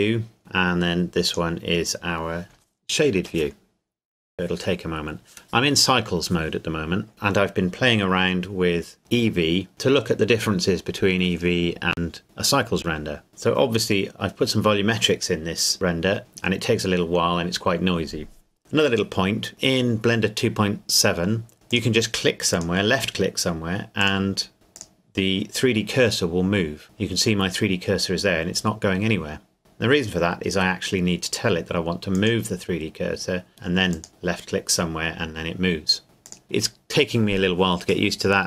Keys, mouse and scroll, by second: 1.3 click, 3.3 click, 21.7 click, 26.8 Escape, 35.7 click, 36.3 click.